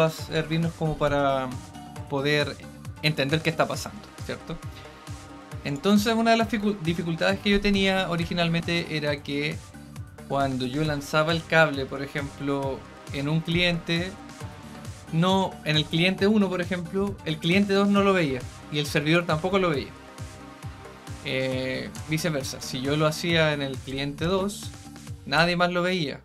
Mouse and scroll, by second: 5.6 click, 14.6-20.8 right drag, 22.6 click, 24.7-26.2 right drag.